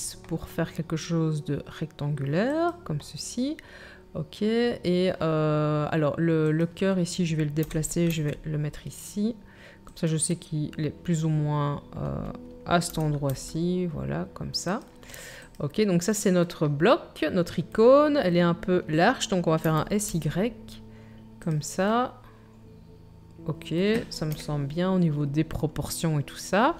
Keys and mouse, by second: 2.8-6.4 drag, 6.6-26.7 drag, 7.6 g, 12.9 g, 19.6 s, 24.3 KP_1.